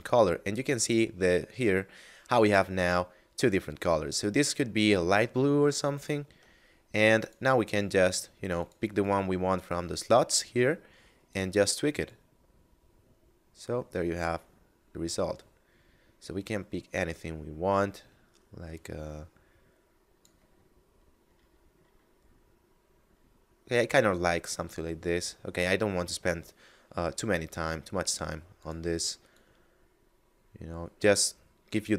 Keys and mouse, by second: 6.1 Tab, 7.0 click, 9.8 middle click, 11.2 click, 20.5 middle click, 28.5 click.